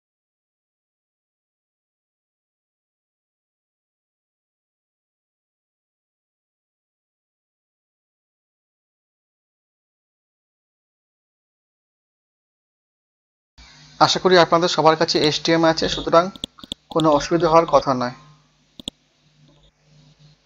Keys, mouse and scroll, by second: 0.0-2.4 typing, 4.2-5.2 scroll down 1, 5.2 scroll up 1, 5.8 Return, 6.4-8.9 typing, 10.1-13.1 typing, 14.2 scroll down 1, 15.2 click, 17.9 Delete, 18.2-18.8 scroll down 1, 18.8 click, 19.9 scroll up 1.